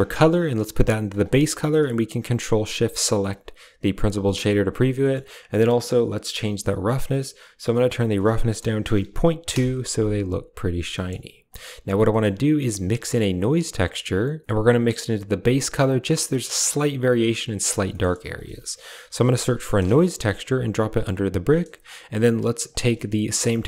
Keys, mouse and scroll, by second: 1.2 middle click, 3.0 ctrl+shift+click, 4.2 shift+middle click, 4.9 middle click, 7.7-9.4 drag, 10.8 middle click, 12.0 middle click, 17.8 middle click, 18.2 shift+a, 21.8 click, 22.4 g, 22.8 click, 23.2 a, 23.4 drag.